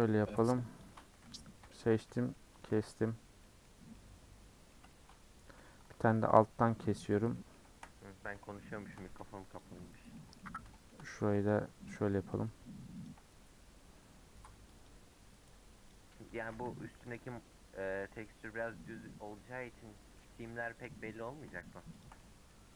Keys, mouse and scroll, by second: 0.3 shift+click, 0.8 shift+click, 1.6 ;, 2.3 middle click, 2.7 alt+z, 2.9-3.9 scroll down 8, 3.5 middle click, 3.9 middle click, 5.1-6.0 scroll up 3, 6.0 alt+click, 6.5 scroll down 1, 6.6 middle click, 7.5 middle click, 7.8-8.4 scroll up 3, 8.4-9.6 shift+middle drag, 9.6 alt+click, 10.1-11.5 middle drag, 11.5 click, 11.9 click, 12.1 middle click, 13.0 ctrl+click, 14.8 click, 15.9 click, 16.2 scroll down 1, 16.4 a, 17.2 u, 19.8 middle click, 20.3 3, 20.8 click, 22.0 shift+click, 22.2-22.7 middle drag.